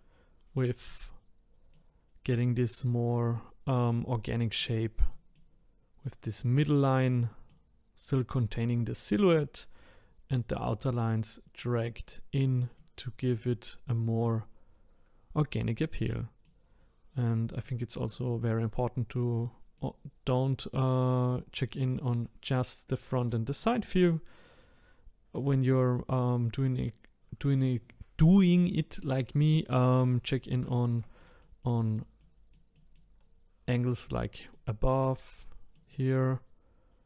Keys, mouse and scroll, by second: 0.5-0.8 scroll down 1, 0.8-2.1 middle drag, 2.1-3.7 scroll up 2, 3.7-4.2 scroll down 2, 4.2-12.1 middle drag, 12.7-21.1 middle drag, 21.1 click, 23.1-24.5 middle drag, 24.5-25.7 scroll up 2, 29.5-36.6 shift+middle drag.